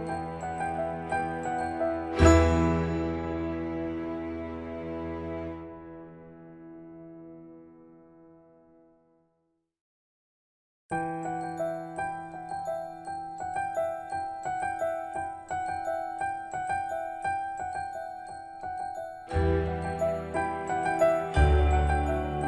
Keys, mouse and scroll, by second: 1.2 ctrl+s, 6.1-7.7 drag, 9.5 space, 12.3 click, 15.4 middle click, 16.5-17.1 scroll up 1, 17.1-17.6 scroll down 1, 21.2 click.